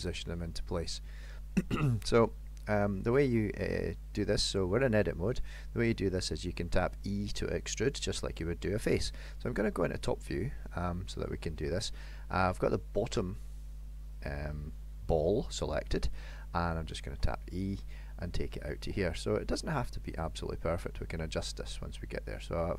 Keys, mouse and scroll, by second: 0.4 middle click, 3.6 middle click, 6.1 middle click, 9.5 KP_7, 13.5 middle click, 15.8 KP_7, 17.2 e.